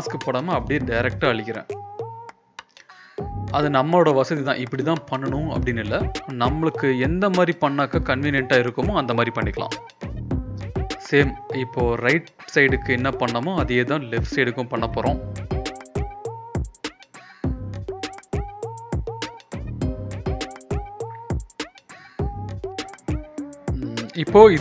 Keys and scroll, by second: 1.1 Return, 1.4 v, 1.8 ctrl+e, 2.5 ctrl+z, 3.2 ctrl+z, 5.7 ctrl+alt+l, 6.1 Escape, 6.4 ctrl+l, 7.7 ctrl+b, 8.2 Return, 9.2 Return, 9.4 ctrl+b, 10.8 Return, 11.0 e, 19.0 v, 20.4 ctrl+b, 21.8 Return, 22.2 ctrl+l, 24.4 Return.